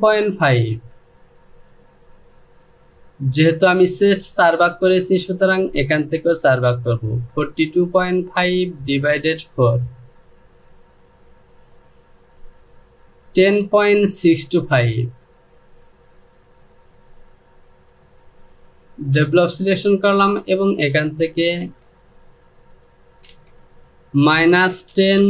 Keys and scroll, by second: 22.9 Down, 23.8 KP_Subtract, 24.6-25.2 typing.